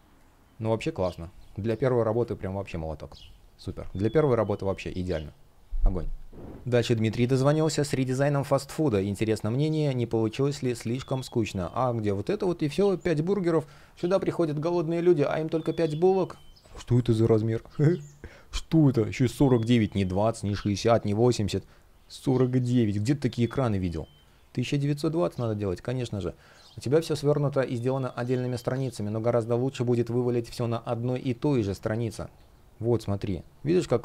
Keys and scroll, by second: 6.4 space, 7.1 space, 10.3 space, 11.3 super+space, 12.8 space, 13.9 space, 23.4 space, 25.9 space.